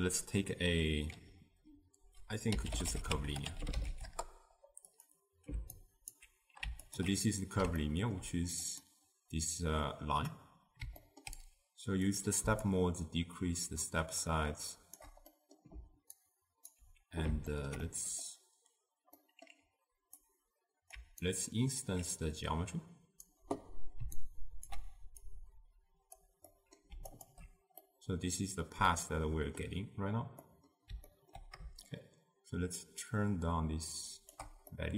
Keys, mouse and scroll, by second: 6.2-6.9 alt+right drag, 6.9 alt+shift+click, 7.9-8.8 ctrl+middle drag, 8.8 click, 12.1-16.8 drag, 16.8-24.8 alt+right drag, 26.2-27.9 drag, 27.9-32.1 middle drag, 32.1-34.9 shift+drag.